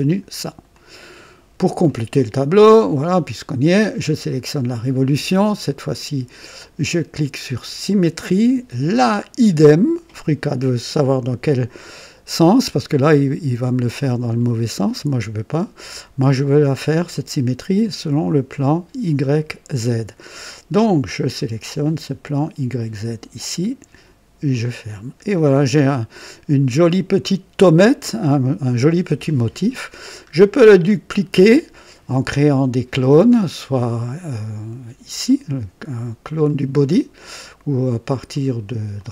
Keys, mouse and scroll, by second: 0.7 click, 1.8 click, 4.1 click, 7.6 click, 11.9-12.9 drag, 14.5-15.8 drag, 16.2 click, 17.1-17.8 drag, 21.0 click, 22.8 click, 24.4 click, 25.3-26.9 drag, 27.3-29.7 drag, 29.9-30.3 scroll down 2, 30.6-31.5 drag, 35.2 click, 36.4 click, 38.3 click, 38.9 click.